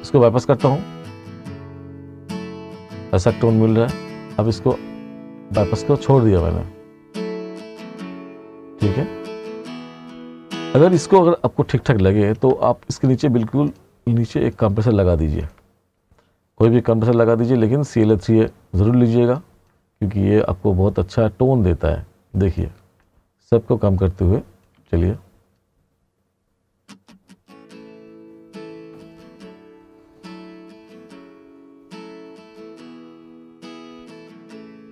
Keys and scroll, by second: 11.2 space, 24.8 space.